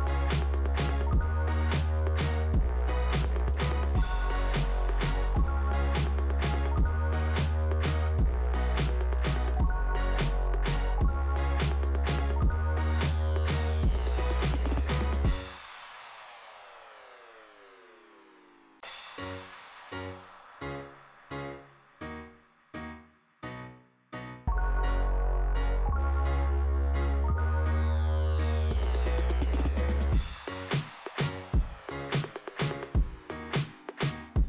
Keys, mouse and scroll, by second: 1.6 click, 2.0 right click, 2.1 double right click, 3.9 click, 5.2 p, 7.2-7.6 scroll down 1, 7.6 middle click, 9.1 click, 10.6 click, 13.0 middle click, 13.9-14.6 scroll up 1, 14.6-15.0 scroll up 1, 15.1 click, 19.4-20.5 scroll up 1, 20.5 click, 21.8 click, 24.6 click, 30.0-30.5 scroll down 1, 30.5 middle click, 31.6 click, 33.3 right click, 33.4 click, 34.3 click.